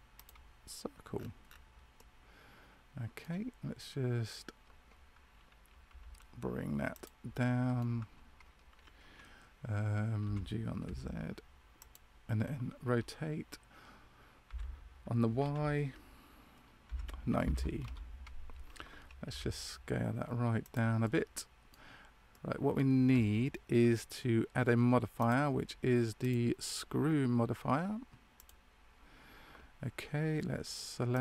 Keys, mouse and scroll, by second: 1.1-1.9 scroll down 4, 1.4-1.9 scroll up 1, 1.9 middle click, 1.9 scroll down 1, 7.2 middle click, 7.2 g, 10.2 g, 20.9 middle click, 22.2 middle click, 25.1 click, 31.1 click.